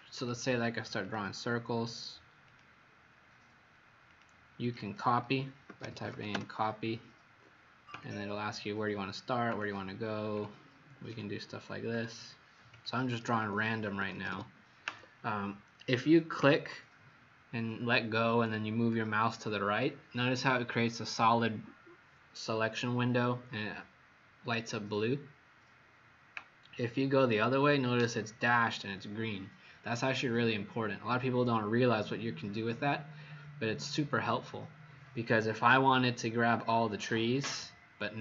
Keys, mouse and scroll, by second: 0.1 click, 4.7 click, 5.4-6.5 typing, 7.9 click, 13.3 Escape, 13.8 Escape, 16.3 click, 35.7 Escape.